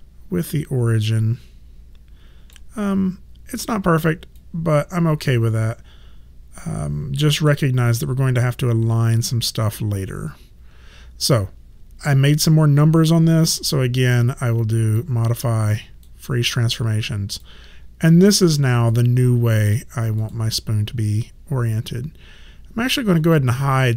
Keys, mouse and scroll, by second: 4.4 alt+click, 14.9 click, 17.3 click, 19.7 click, 23.2 click.